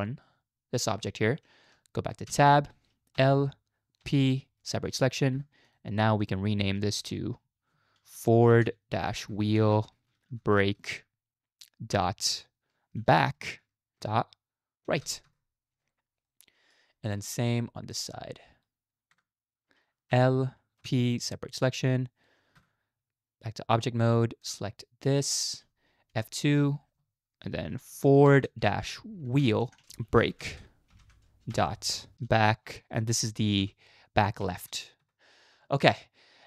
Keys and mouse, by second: 2.3 Tab, 3.2 l, 4.1 p, 5.4 Tab, 5.6 click, 7.1 F2, 9.6 e, 16.3-16.7 middle drag, 17.3 shift+middle click, 19.1 Tab, 20.1 l, 20.8 p, 22.6 Tab, 24.4 click, 26.1 F2, 29.8 e.